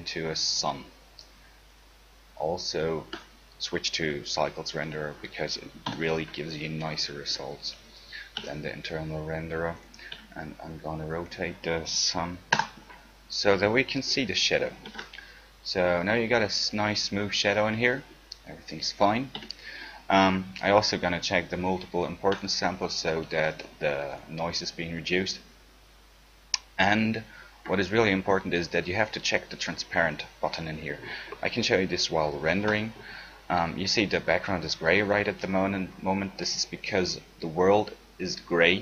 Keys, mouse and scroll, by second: 5.0-6.1 middle drag, 6.1 KP_7, 8.5 g, 10.3 r, 12.7 KP_0, 15.1 ctrl+shift+z, 19.6 z, 32.8 ctrl+shift+z, 37.1-38.8 right drag.